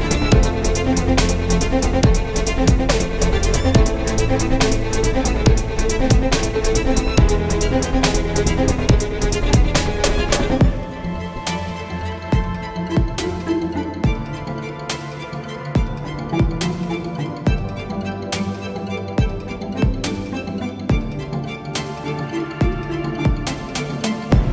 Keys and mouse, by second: 3.1 Tab, 8.4 Tab, 8.9 ctrl+Tab, 9.8 z, 10.6 ctrl+b, 11.7 z, 12.8 e, 13.8 Tab, 14.0 z, 16.6 KP_1, 18.4 ctrl+KP_1, 19.0 z, 20.0 z, 21.4 Tab, 22.0 z, 23.2 ctrl+b, 24.2 z.